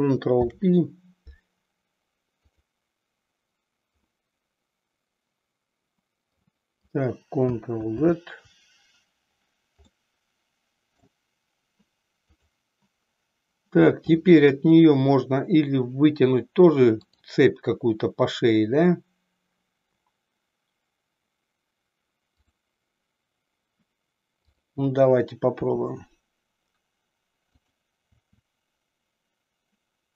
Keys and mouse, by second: 0.3 ctrl+p, 4.2-6.7 middle drag, 7.9 ctrl+z, 10.0-11.3 middle drag, 12.3 click, 24.3 click, 27.7 click, 28.3 e.